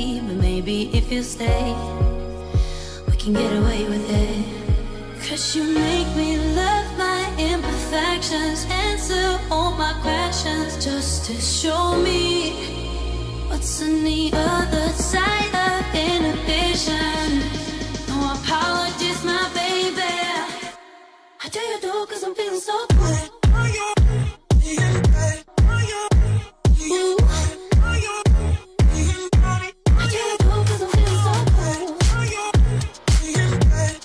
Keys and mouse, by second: 5.4 r, 6.5 r, 9.0 r, 9.8 ctrl+z, 9.9 ctrl+z, 10.3 ctrl+z, 11.8 a, 16.6 ctrl+z, 16.8 ctrl+z, 18.6 a, 19.3 a, 22.0 a, 23.6 i, 27.0-27.7 Right, 30.5 r, 31.3 ctrl+z, 32.2 shift+middle click.